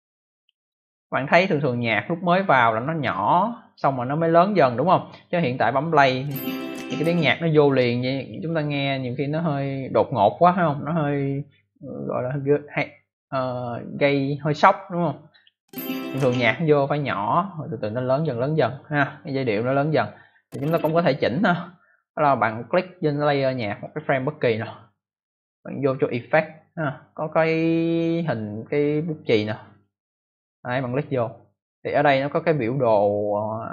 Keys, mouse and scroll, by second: 0.2 click, 0.9 click, 2.3 click, 3.6 click, 3.7 click, 5.8 click, 6.9 click, 7.9 click, 15.2 click, 16.1 click, 20.2 click, 23.7 click, 29.6 click.